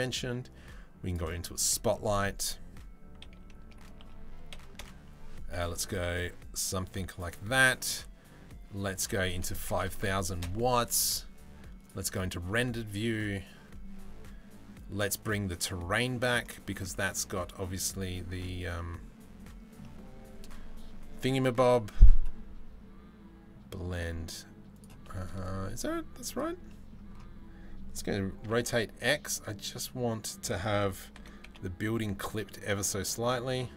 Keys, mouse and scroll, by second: 1.0-1.4 drag, 2.8-5.6 typing, 7.4 middle click, 8.6-10.1 middle drag, 9.5 KP_0, 9.6 KP_0, 16.0 middle click, 16.5-17.3 middle drag, 18.4 middle click, 19.4 middle drag, 24.5-25.9 drag, 26.3 middle click, 28.0 r, 30.8 r.